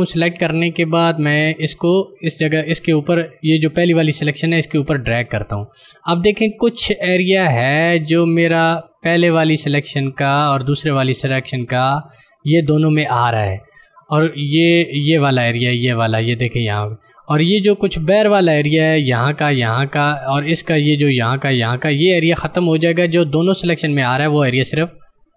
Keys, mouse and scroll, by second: 3.1 click.